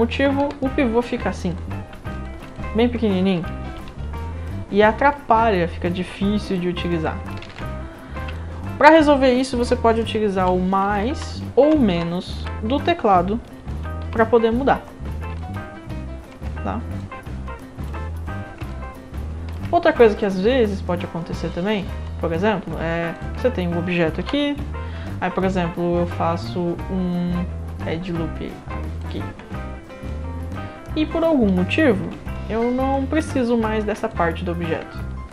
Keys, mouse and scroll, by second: 1.5 click, 2.1 alt+drag, 2.5 click, 3.9 e, 5.2 scroll down 4, 6.5 click, 7.4 ctrl+z, 8.1 middle click, 8.4 alt+click, 14.0 r, 14.9 scroll down 5, 15.4-16.3 alt+drag, 17.0-17.9 drag, 17.7 right click, 18.3 scroll down 1, 18.7-19.5 alt+drag, 18.7-19.5 alt+right drag, 20.2-20.7 drag, 21.5 alt+click, 22.0-22.7 right drag, 23.1 click, 24.2 w, 24.4 middle click, 29.0 ctrl+click, 29.0 ctrl+right click, 32.0 w, 32.3-32.9 right drag, 33.3-33.8 alt+drag, 34.1 click, 34.3 right click, 34.9-35.3 alt+drag, 34.9-35.3 alt+right drag.